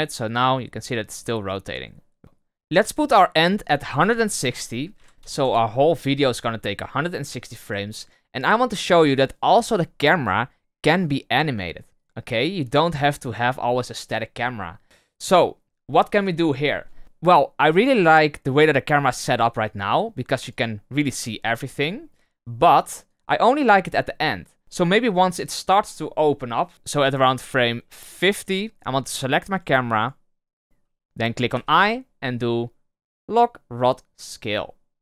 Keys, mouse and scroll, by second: 3.5-6.6 drag, 11.0 right click, 11.4 right click, 11.9 right click, 12.3 right click, 12.6 right click, 12.9 right click, 14.4-14.8 drag, 17.0 Right, 19.7-22.7 drag, 23.1-24.6 drag, 26.9-29.5 drag, 29.5 right click, 29.9 right click, 30.4 right click.